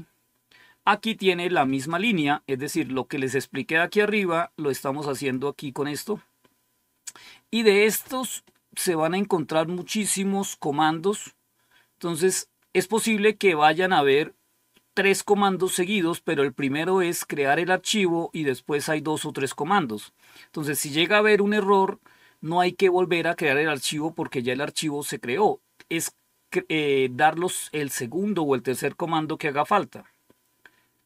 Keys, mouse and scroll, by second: 5.1 click, 6.2-6.8 scroll down 2, 7.2-8.0 scroll up 1, 8.0 scroll up 1, 17.0 click, 24.6 click, 29.3-30.0 scroll down 2.